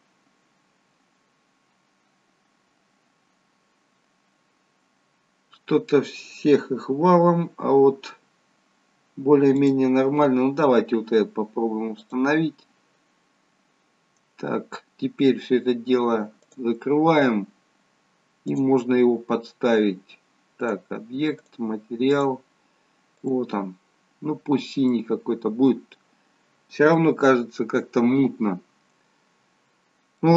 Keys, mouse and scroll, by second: 3.5-5.1 scroll down 1, 6.7-7.3 scroll down 1.